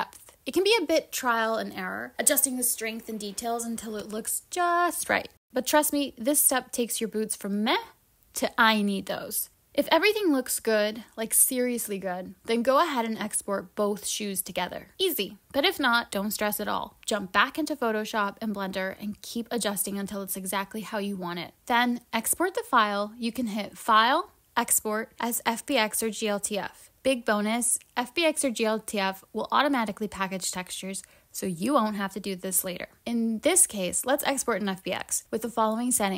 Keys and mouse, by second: 13.3-17.0 drag, 21.8-23.7 drag.